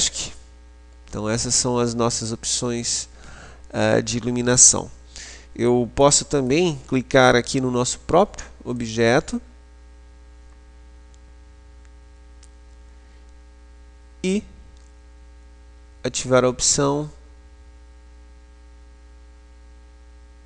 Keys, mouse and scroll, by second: 0.0 Escape, 1.0-6.1 middle drag, 6.1 right click, 6.6 middle click, 6.8 right click, 7.8-8.8 middle drag, 8.8 click, 11.3-14.6 middle drag.